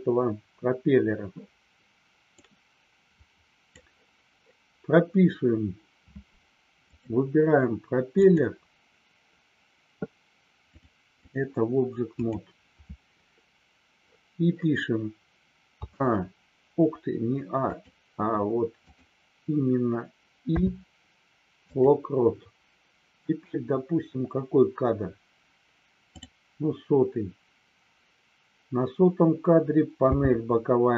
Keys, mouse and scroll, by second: 2.6-30.9 drag.